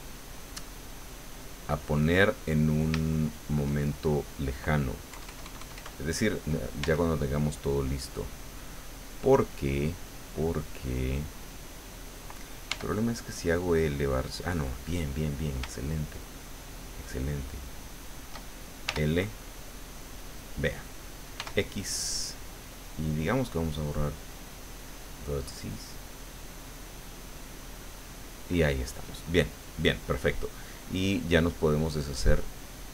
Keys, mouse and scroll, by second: 1.1 click, 2.1-3.7 middle drag, 5.1 KP_Add, 6.8 Tab, 10.5 right click, 12.7 l, 16.3 shift+right click, 18.8 l, 21.3 x, 25.0 click, 32.6 click.